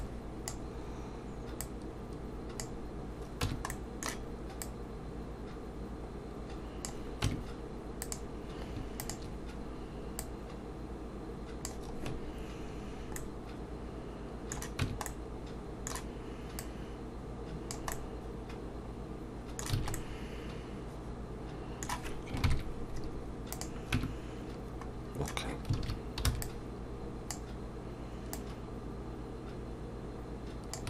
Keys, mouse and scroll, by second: 1.6 click, 3.4 Tab, 3.7 middle click, 4.6 click, 7.2 Tab, 8.0 click, 9.0 shift+click, 10.2 click, 13.2 middle click, 14.8 Tab, 15.1 middle click, 16.6 click, 17.9 middle click, 19.8 alt+a, 19.9 middle click, 22.4 ctrl+KP_3, 23.5 click, 23.9 Tab, 25.1-25.5 scroll down 1, 25.8 alt+a, 26.3 b, 28.3 click.